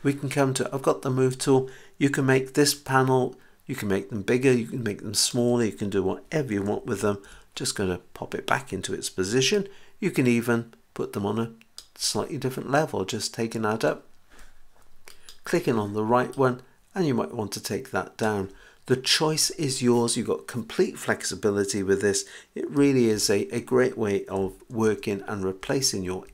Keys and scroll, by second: 7.0 super+z, 23.1 h, 24.8 super+z.